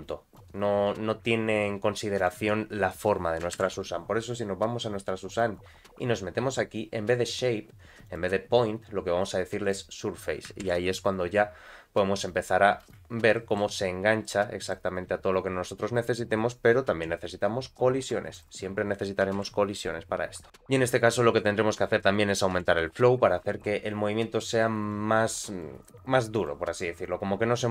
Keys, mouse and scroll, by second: 0.5 space, 0.8-1.2 scroll up 2, 2.2 click, 3.7 shift+Left, 5.3 click, 8.0-9.7 drag, 10.6 shift+Left, 11.5-12.8 scroll down 1, 12.8 space, 13.3 middle click, 13.8-14.2 scroll up 2, 14.2 middle click, 18.3 click, 19.4 shift+Left, 20.5 space, 22.5 shift+Left, 24.9 click, 26.4 click.